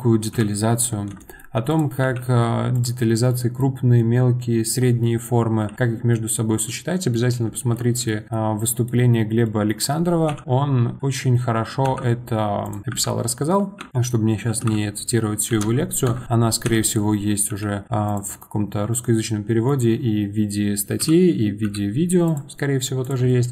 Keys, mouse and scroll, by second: 0.3 KP_7, 0.9 scroll up 2, 1.2-1.7 shift+middle drag, 1.7 click, 2.0 g, 3.3-3.6 middle drag, 3.6-4.0 scroll down 2, 4.0-9.1 middle drag, 9.1 scroll up 2, 9.4-10.3 middle drag, 10.3 KP_7, 13.9 middle click, 16.6 KP_7, 17.5 g, 18.3-21.0 middle drag, 21.0 KP_7, 22.5-23.0 middle drag, 23.0 click, 23.2-23.5 middle drag.